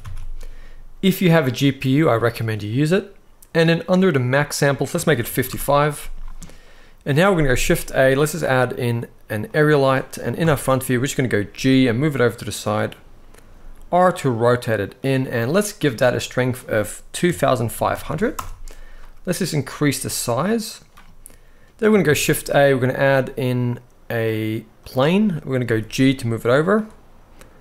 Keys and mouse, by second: 1.1-2.5 drag, 4.4 click, 5.1 5, 7.3 shift+a, 10.1 KP_1, 11.2 g, 12.4-13.2 drag, 13.2 r, 15.4 click, 16.2-18.1 drag, 17.8 0, 19.2-20.7 drag, 21.8 shift+a, 25.4 g, 26.3 click, 27.3 r.